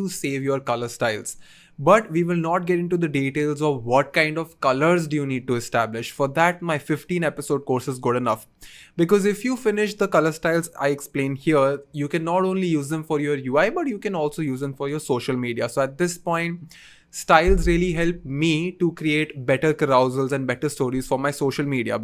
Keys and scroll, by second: 8.7-9.5 typing.